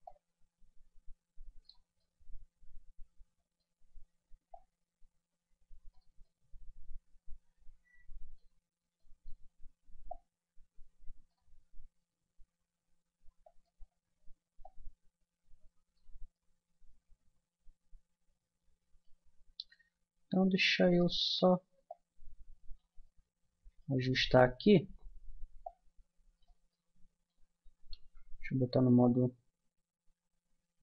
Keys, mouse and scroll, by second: 0.0 middle click, 2.0-11.9 middle drag, 12.1 s, 14.6-16.4 drag, 16.4-18.3 middle drag, 19.4-26.1 middle drag, 26.7 middle click, 28.0 KP_1.